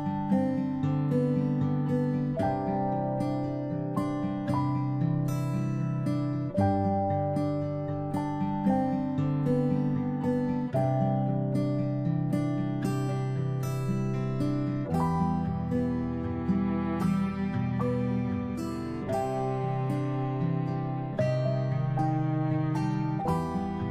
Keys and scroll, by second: 3.0 ctrl+c, 6.0 ctrl+v, 7.5-8.1 space, 11.2 ctrl+g.